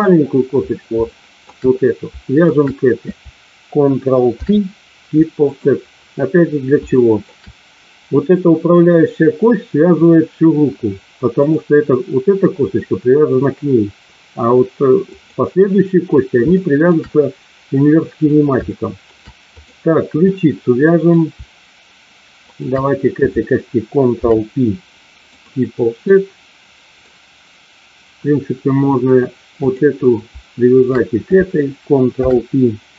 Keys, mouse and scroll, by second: 1.1 shift+middle click, 2.5 shift+click, 4.2 ctrl+p, 7.0 shift+middle click, 11.3 click, 15.1 click, 16.5 shift+middle click, 18.6 shift+middle click, 20.3 middle click, 24.1 ctrl+p, 26.1 middle click, 29.7 click, 32.1 ctrl+p.